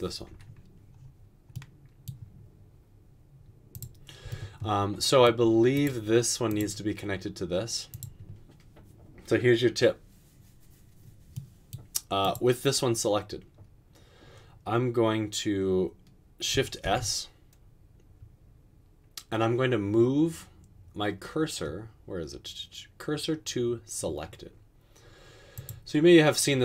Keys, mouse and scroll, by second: 16.9 s.